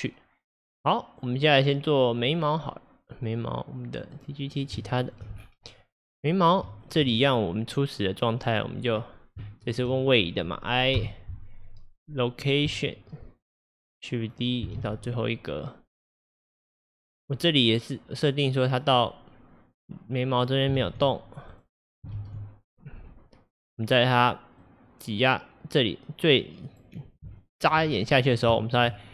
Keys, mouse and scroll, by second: 2.3 click, 4.2 click, 4.9-5.4 shift+middle drag, 5.4 scroll, 6.1 click, 6.9 shift+click, 8.1-12.8 drag, 9.0 scroll, 9.5-11.0 shift+middle drag, 13.7-14.8 drag, 14.8 shift+d, 17.0-20.9 drag, 20.9 shift+d, 22.2 shift+d, 24.7-29.0 drag, 27.4-27.9 shift+middle drag, 27.9 scroll, 28.6-29.0 shift+middle drag, 29.0 scroll.